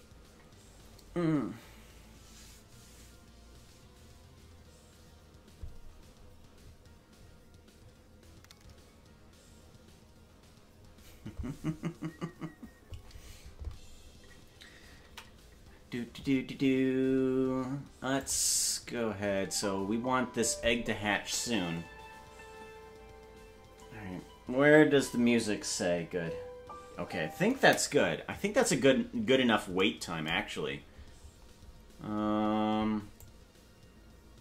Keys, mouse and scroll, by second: 18.2 click, 19.2 space, 27.6 space, 33.2-34.4 drag.